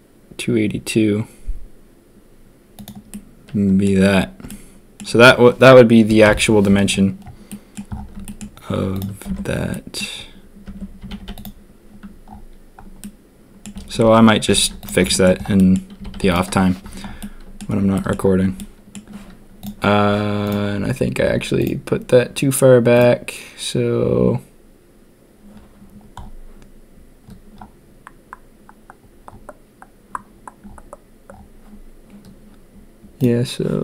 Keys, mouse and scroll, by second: 3.1-3.8 drag, 4.4-4.9 drag, 6.2 ctrl+KP_1, 7.4 click, 8.2 shift+drag, 9.2 Tab, 9.7 click, 10.6 Tab, 11.0 a, 11.1 a, 13.0-13.6 drag, 13.9 ctrl+s, 14.5 ctrl+a, 15.1 shift+drag, 15.5 drag, 15.9 a, 16.1 a, 17.1-17.5 drag, 17.9 shift+drag, 18.5 click.